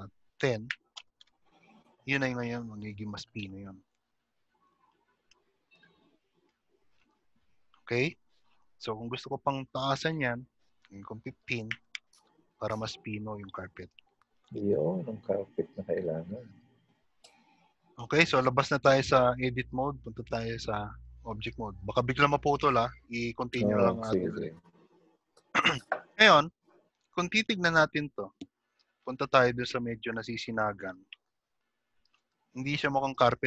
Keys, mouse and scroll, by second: 3.0 click, 8.4 shift+middle click, 8.4-10.1 scroll up 3, 13.9 scroll down 2, 17.8 Tab, 21.7 shift+middle click, 24.7 click, 25.0-25.3 scroll up 1, 27.7 shift+middle click, 27.7-28.3 scroll up 5, 31.9 middle click.